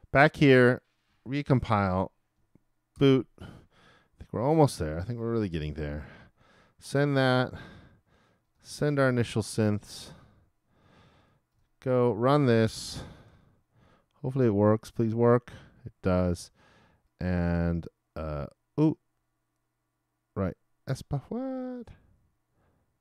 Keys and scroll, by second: 1.5 shift+super+l, 2.9 super+b, 5.6 super+Return, 9.1 super+Return, 13.3 super+r.